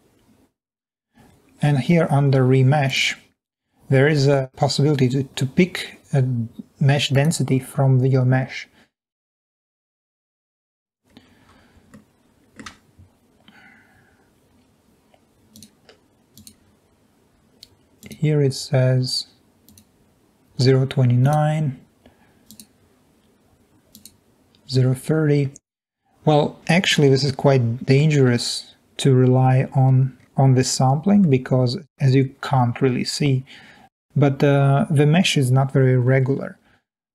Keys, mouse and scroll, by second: 28.4 shift+z, 32.6 middle click, 33.3 scroll up 1, 33.4 middle click, 36.8 shift+z.